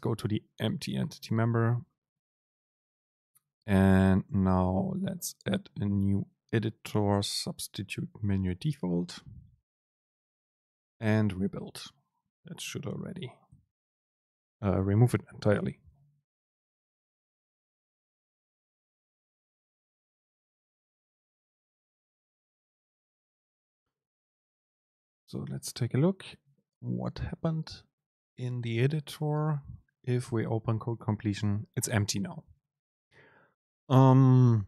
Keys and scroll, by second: 13.7 ctrl+shift+super+F9, 29.4 super+space.